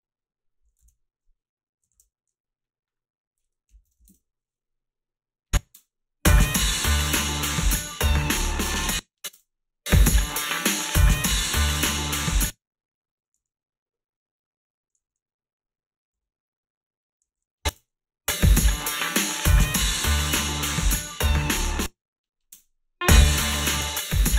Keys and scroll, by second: 0.9 ctrl+z, 1.9 alt+shift+s, 3.4-4.5 typing, 5.7 space, 8.7 space, 9.3 space, 12.2 space, 13.4 s, 15.0 a, 16.1 s, 17.2 a, 17.7 space, 17.7 a, 21.6 space, 22.5 space.